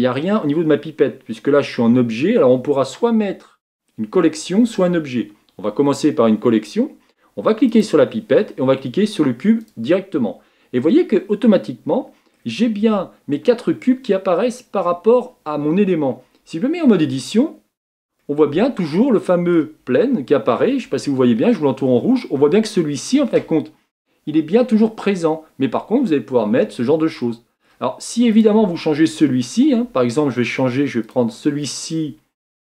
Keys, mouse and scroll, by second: 8.4 click, 10.0-10.8 drag, 10.8-17.8 middle drag, 17.8 Tab, 19.3 middle click, 19.8-21.0 scroll up 3, 21.0-26.7 shift+middle drag, 26.7 Tab, 27.2-28.4 middle drag, 28.4 click, 29.1 middle click, 30.0 Tab, 31.6 click.